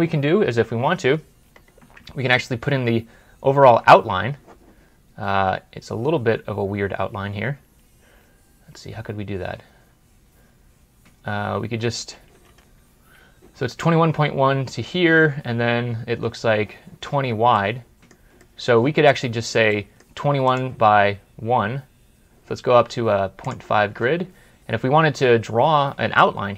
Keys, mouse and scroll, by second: 1.1 scroll up 1, 1.4-2.1 scroll down 2, 3.9 ctrl+scroll up 1, 8.3 ctrl+scroll up 1, 8.4 ctrl+scroll down 1, 9.1-9.5 ctrl+scroll down 1, 17.4 middle click, 20.3 right click.